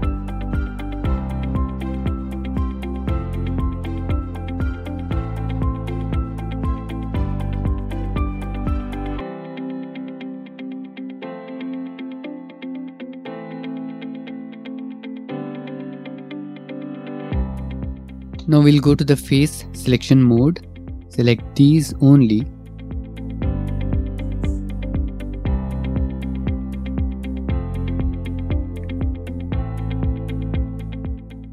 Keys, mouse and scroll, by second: 3.6 shift+click, 3.7 shift+click, 4.4 ctrl+r, 6.7 shift+click, 8.2 click, 9.0 ctrl+r, 10.6 click, 10.7 click, 11.0 ctrl+r, 11.8 click, 11.9 click, 12.2 ctrl+e, 12.3 click, 12.4 ctrl+r, 13.6 click, 13.7 click, 16.7 middle click, 17.3 middle click, 17.6 click, 17.8 3, 18.6 click, 19.5 shift+click, 20.8 click, 21.6 click, 22.1 shift+click, 22.7 click, 23.3 shift+click, 23.6 shift+click, 23.9 shift+click, 24.6 shift+click, 26.4 shift+click, 26.8 shift+click, 27.9 middle click, 28.3 e, 30.8 click, 31.2 middle click, 31.3 scroll.